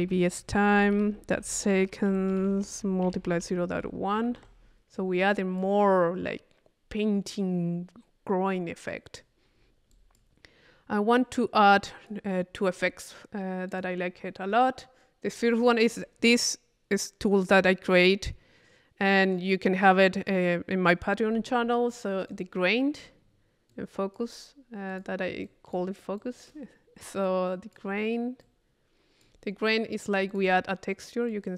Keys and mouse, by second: 5.3 click, 8.9 click, 9.5 middle click, 9.9 click, 11.2-12.5 drag, 12.5 middle click, 13.7 click, 14.6 click, 22.3-23.4 drag, 23.7 click, 24.9-26.8 drag, 27.2 click, 28.4-29.6 drag, 29.7 click, 31.3-31.5 drag.